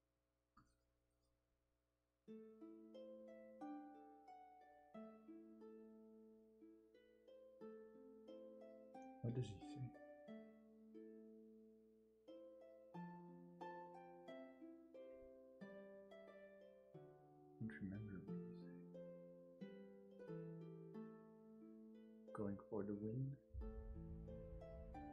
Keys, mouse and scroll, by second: 2.3 ctrl+z, 6.9 ctrl+z, 11.7 space, 18.8 ctrl+z, 19.0-20.0 scroll down 1, 20.4-22.0 scroll up 1.